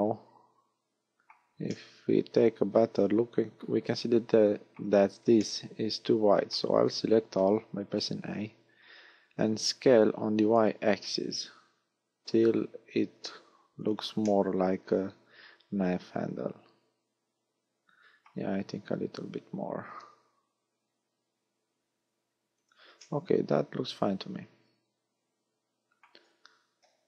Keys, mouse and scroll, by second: 1.7 middle click, 5.4 middle click, 6.8 a, 9.3 s, 13.9 click, 14.3 middle click, 18.9 s, 22.7 click, 23.0 middle click, 26.8 KP_1.